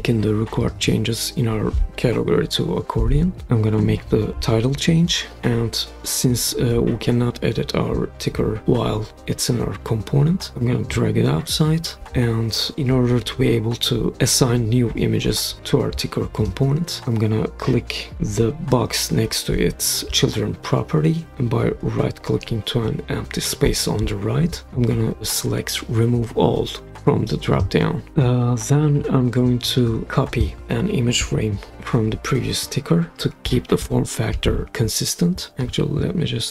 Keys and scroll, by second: 2.7-3.9 typing, 31.7 super+c, 34.3 super+v, 35.6 super+x.